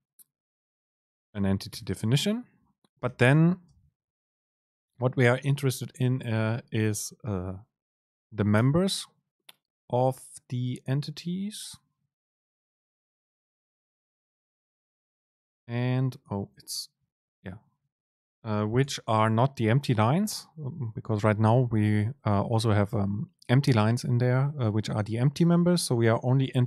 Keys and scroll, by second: 2.1 Right, 3.7 Right, 3.8 super+space, 15.1 super+p, 17.6 Up.